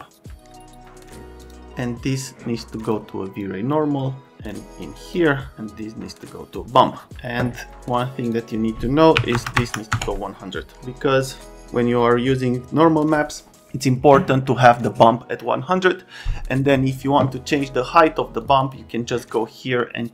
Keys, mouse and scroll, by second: 1.4 click, 2.2 click, 3.4 click, 4.3 click, 4.8 click, 5.8 click, 8.2 click, 8.4 click, 9.1 KP_1, 9.3 KP_0, 9.6 KP_0, 10.0 KP_Enter, 18.4 click, 18.6 click.